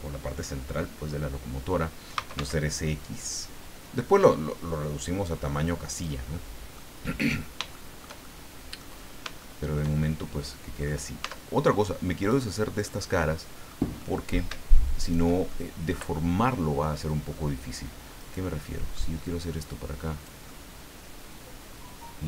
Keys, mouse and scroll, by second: 1.9-2.9 typing, 5.9 click, 6.3 middle click, 7.3-7.7 scroll up 1, 7.7 shift+middle click, 8.6 middle click, 9.0-9.3 scroll up 1, 9.4 shift+middle click, 10.0-11.0 shift+middle drag, 11.2 Tab, 12.3 right click, 12.8-13.9 middle drag, 14.0 middle click, 15.0 shift+right click, 15.5 shift+middle click, 16.9 middle click, 18.2 right click, 18.6 middle click, 19.2-20.4 drag, 20.5-22.2 middle drag.